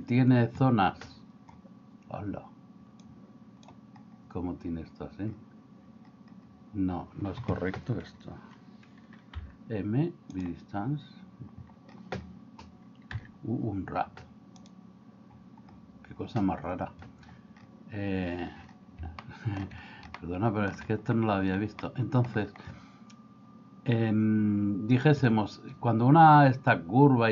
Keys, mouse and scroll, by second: 3.2 click, 9.3 m, 13.2 u, 19.3 middle click, 20.2 shift+middle click, 21.8 middle click.